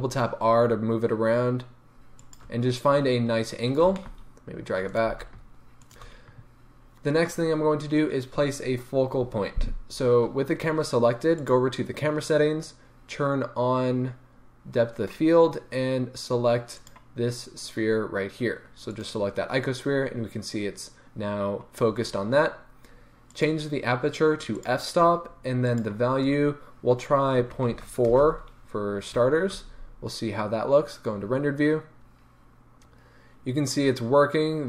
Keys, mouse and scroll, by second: 2.5 shift+click, 3.3-3.9 scroll down 2, 3.9 g, 5.0 click, 5.0 g, 11.4 click, 16.7 click, 23.3-34.6 drag, 28.2 Return, 29.1 z.